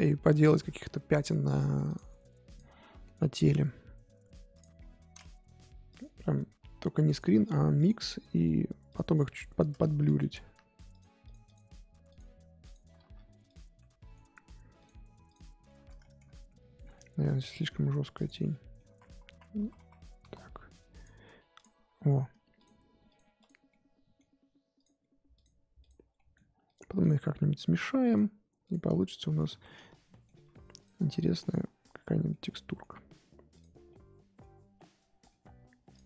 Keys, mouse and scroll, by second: 2.5-4.6 drag, 4.8 scroll up 3, 5.5 f, 6.1-7.8 middle drag, 7.8-9.3 drag, 9.3 middle click, 9.9 ctrl+z, 10.4 f, 11.2-13.0 drag, 13.0 f, 13.8-14.8 middle drag, 14.8 click, 15.7 middle click, 16.4 f, 18.5 middle click, 18.9 ctrl+z, 19.1 ctrl+z, 19.3 ctrl+z, 19.6 ctrl+z, 19.8 ctrl+z, 20.2 ctrl+z, 21.0 click, 21.5-23.7 drag, 23.7-24.7 middle drag, 24.7-26.1 drag, 26.1 middle click, 26.6-28.9 drag, 28.9 middle click, 29.5 ctrl+z, 30.1 middle click, 30.3 f, 31.4 click, 32.3 middle click, 32.9-33.5 scroll up 1, 33.5 click, 33.9-35.9 middle drag, 35.9 click.